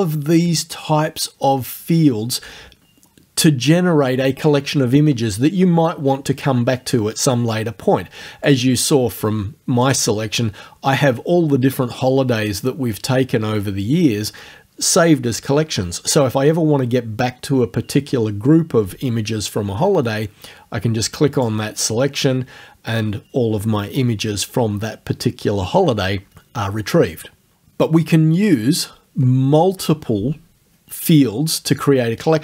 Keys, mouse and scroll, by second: 8.5 click, 9.9 click.